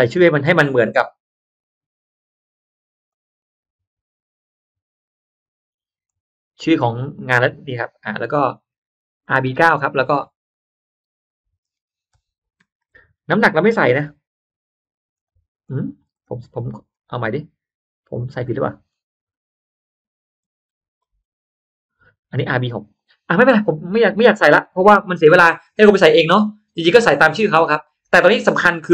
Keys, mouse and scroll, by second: 3.0 click, 6.0 click, 9.1 click, 9.3 click, 9.9 click, 10.7 click, 12.5 ctrl+c, 15.1 click, 16.9 ctrl+z, 18.6 ctrl+z, 20.3 ctrl+z, 21.0 ctrl+z.